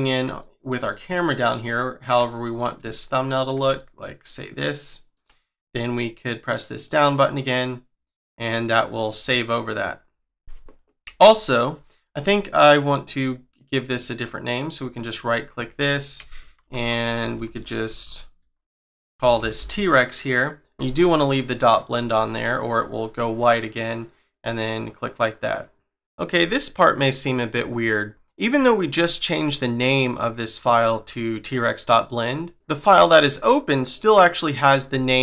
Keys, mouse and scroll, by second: 0.4 shift+middle click, 0.9 middle click, 1.6 middle click, 2.3 shift+middle click, 2.9 ctrl+middle click, 3.8 shift+middle click, 6.8 click, 14.8 right click, 16.6 Left, 17.2 Right, 17.5 Right, 17.7 Right, 18.0 Right, 19.2 BackSpace, 19.6 BackSpace.